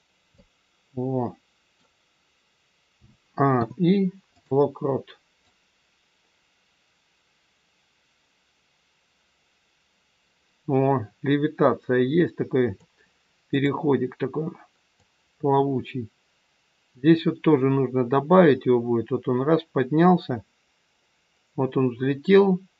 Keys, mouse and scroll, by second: 0.2 middle click, 2.9 a, 3.5 i, 5.4 click, 13.5 click, 14.9 click.